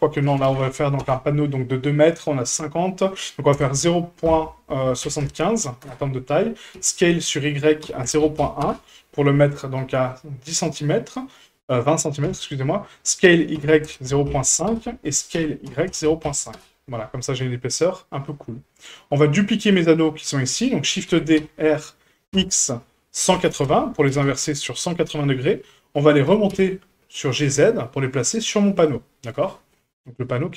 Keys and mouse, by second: 6.7 s, 10.1-10.6 middle drag, 12.2 s, 17.9-18.3 middle drag, 18.6 shift+middle drag, 19.4 click, 19.9 shift+middle click, 20.4 middle drag, 21.1 shift+d, 26.2 g, 29.7-30.3 middle drag.